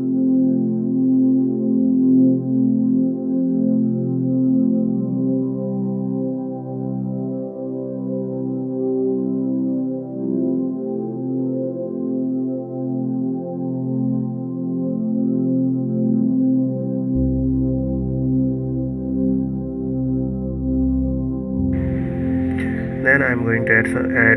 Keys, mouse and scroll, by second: 0.0 click, 0.3 g, 3.0-3.3 scroll down 1, 3.5 middle click, 4.1 KP_1, 4.5-4.9 scroll up 1, 4.9-5.3 scroll down 2, 5.3 click, 6.0 g, 7.3 click, 7.6 g, 10.4 s, 12.0 click, 12.4 click, 12.6 click, 13.0 g, 16.9 p, 18.6 Tab, 19.5 click, 22.7-24.3 drag.